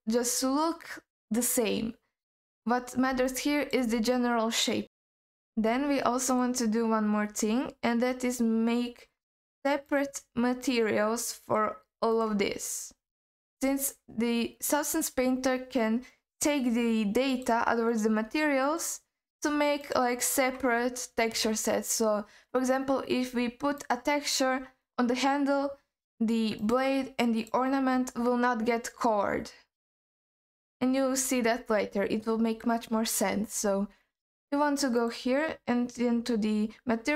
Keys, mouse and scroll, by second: 2.3-3.1 scroll up 1, 3.1 scroll up 1, 3.3-3.7 alt+middle drag, 4.8 scroll up 2, 5.1 alt+middle click, 5.7-6.3 scroll up 1, 6.3 click, 9.1-9.8 scroll down 1, 9.8 click, 10.6 click, 11.4 click, 12.1-15.7 drag, 17.3 click, 17.9 click, 18.7 click, 19.8-22.8 drag, 23.8 click, 26.6 click, 27.4 click, 30.3 click, 35.0 click.